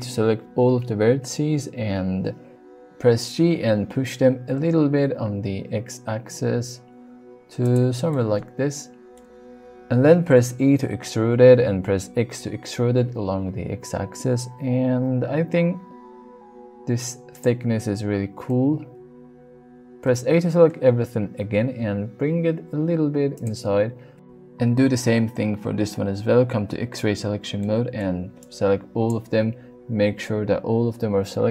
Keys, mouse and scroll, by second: 5.0 x, 7.6 click, 8.1-9.2 middle drag, 10.6 e, 17.3 click, 20.0 a, 21.5 g, 21.7 x, 23.3 click, 23.8 Tab, 24.5 middle click, 25.2 Tab, 26.6 alt+z, 27.6 middle click, 28.4 click.